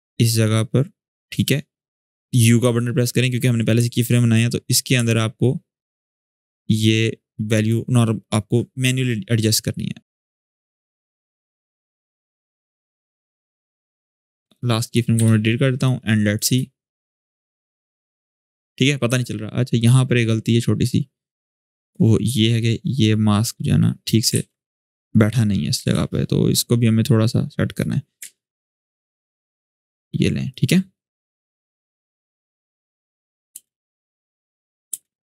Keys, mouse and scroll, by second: 2.4 u, 3.6 alt+scroll up 1, 5.1-7.3 ctrl+drag, 10.3-10.7 ctrl+drag, 12.4-13.7 ctrl+drag, 16.2 space, 18.4-19.6 drag, 19.9-21.5 scroll up 1, 21.5-23.9 drag, 24.1 ctrl+z, 24.7 click, 25.5 ctrl+z, 26.3-27.5 drag, 28.7 ctrl+z, 29.1-30.3 drag, 33.3 space.